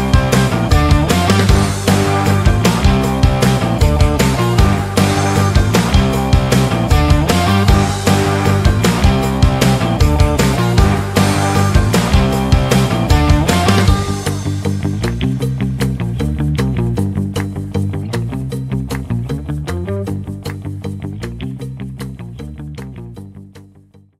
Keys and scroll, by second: 10.0 F9, 11.2 F9, 15.2 F9.